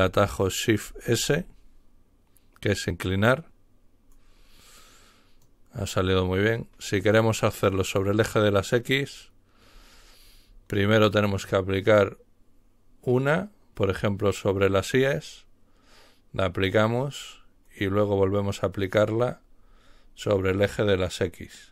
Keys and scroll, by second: 0.7 shift+s.